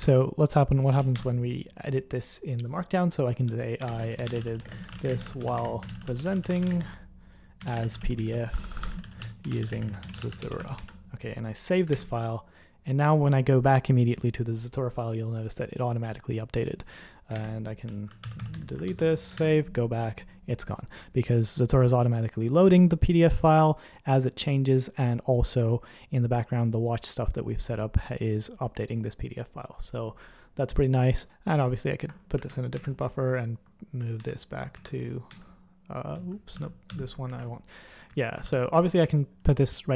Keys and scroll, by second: 0.0 super+1, 0.9 k, 1.1 o, 3.6-11.1 typing, 11.9 super+2, 17.4 super+1, 17.6-19.3 typing, 19.3 super+2, 21.1 typing, 32.4 super+!, 32.7 super+1, 34.2 super+@, 34.7 super+@, 35.3 super+2, 36.1 super+l, 36.5 super+h, 36.9 super+h, 37.3 super+!, 38.4 shift+super+h.